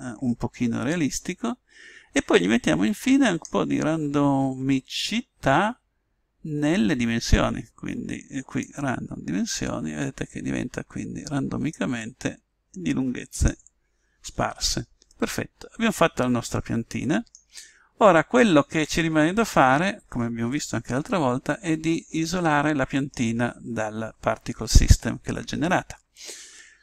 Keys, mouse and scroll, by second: 0.9 click, 14.5-16.9 middle drag, 18.3-23.2 middle drag, 23.3-26.8 middle drag.